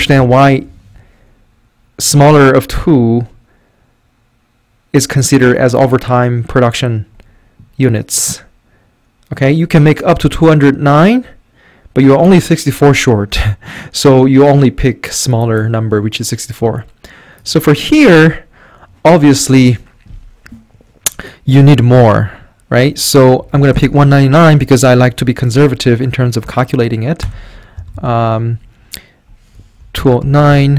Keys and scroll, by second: 0.0 Left, 0.0 shift+Right, 0.2 shift+Right, 23.1-24.2 typing, 27.2 Return, 27.8 Right, 28.0 Up, 29.5-30.7 typing.